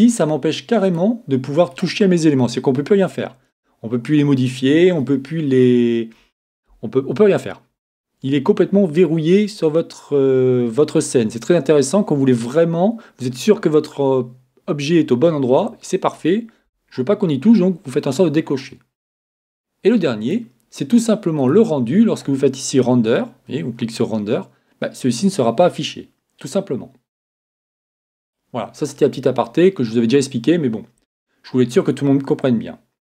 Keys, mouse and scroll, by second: 0.9 right click, 20.2-25.0 drag, 29.8 click.